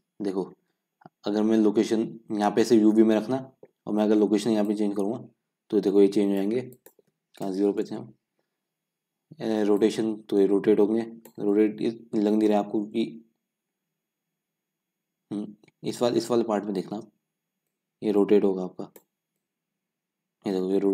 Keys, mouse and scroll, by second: 0.9-1.4 scroll down 4, 1.4-1.7 scroll up 3, 1.7-4.8 middle drag, 4.8-11.5 drag, 11.5-12.5 scroll down 4, 12.5 scroll up 1, 12.7-13.6 middle drag, 13.6-14.3 scroll up 2, 14.3-16.3 scroll down 2, 16.3-17.3 scroll down 1, 17.3-17.9 scroll down 1, 17.9-20.9 drag.